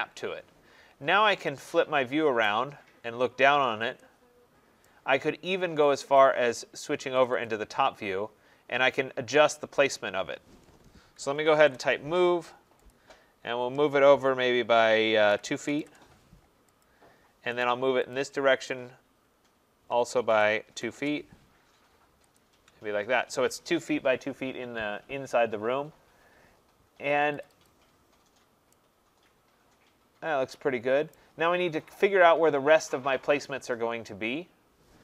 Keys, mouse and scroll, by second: 2.5 right click, 2.6 middle click, 2.7 middle click, 3.4 middle click, 3.6 middle click, 4.9 right click, 5.9 click, 6.2 click, 7.3 click, 7.5 click, 8.2 middle click, 8.3 middle click, 8.7 middle click, 8.8 middle click, 8.9 middle click, 9.3 middle click, 9.3 middle click, 11.0-12.1 typing, 11.2 middle click, 12.9 click, 15.0-15.8 typing, 16.8 click, 17.6 right click, 18.1 click, 20.3-20.9 typing, 22.4 shift+click, 25.8 middle click, 25.8 middle click, 25.9 middle click, 27.4 click, 27.7 click, 28.4 middle click, 28.6 middle click, 31.1 right click, 32.0 middle click, 32.0 middle click, 32.5 middle click, 32.5 middle click, 32.6 middle click, 32.8 middle click.